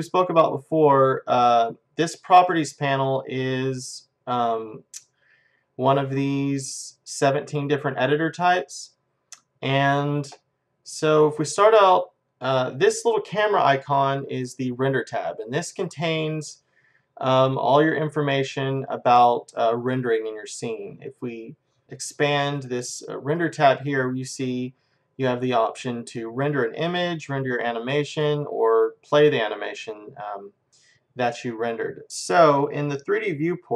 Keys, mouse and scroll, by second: 3.5-5.4 drag, 12.4-14.4 drag, 21.8-23.4 drag.